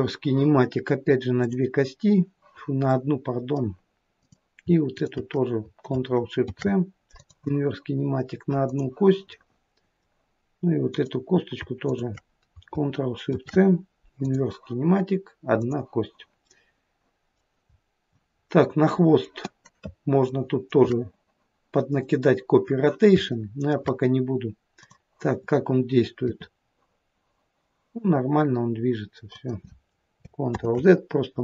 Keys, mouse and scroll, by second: 0.0 ctrl+shift+c, 1.4 click, 3.0 middle click, 4.2 click, 4.9 shift+click, 6.5 ctrl+shift+c, 8.6 click, 9.4 middle click, 10.9 click, 11.9 shift+click, 15.6 click, 16.6 middle click, 17.8-18.5 scroll down 2, 18.5 middle click, 19.6 middle click, 20.3 shift+middle click, 20.8 shift+middle click, 23.8 shift+middle click, 24.8 click, 26.4 r, 30.6 ctrl+z.